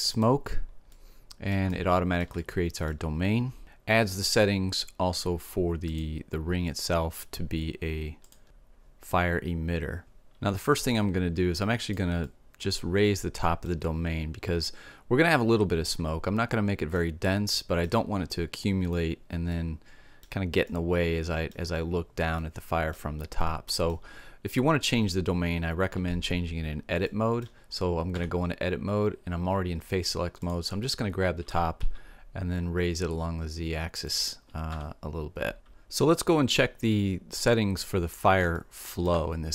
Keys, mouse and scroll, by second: 0.6-3.6 middle drag, 5.6-7.3 drag, 7.3 middle click, 8.0-9.1 drag, 11.3-13.3 drag, 13.3 middle click, 16.5-25.1 middle drag, 26.6-29.9 middle drag, 27.7 Tab, 29.9 click, 31.1 g, 34.2 Tab, 37.3-38.5 drag, 38.5 middle click, 38.9-39.5 drag.